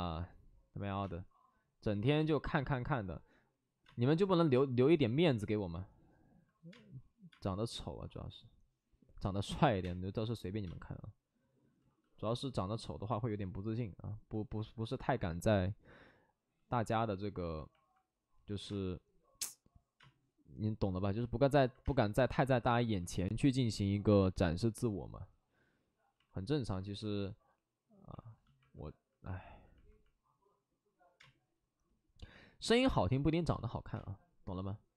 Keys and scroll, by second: 1.0 space, 2.1 space, 3.8 space, 6.7 space, 7.3 space, 9.6 ctrl+z, 9.7 space, 10.6 space, 11.8 ctrl+z, 16.4 ctrl+z, 17.3 ctrl+z, 18.6 space, 19.9 space, 21.8 space, 26.2 alt+s, 28.1 alt+s, 31.1 space, 33.9 space.